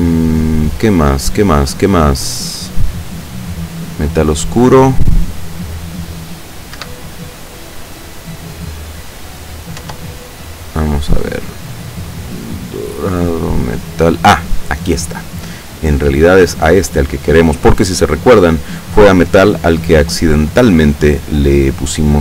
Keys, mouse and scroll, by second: 1.4-3.1 scroll up 4, 3.1 click, 4.4 click, 5.4-5.8 scroll up 2, 6.8 Escape, 9.4 right click, 9.8 Tab, 10.2 right click, 12.3 right click, 13.8 click, 20.4 click.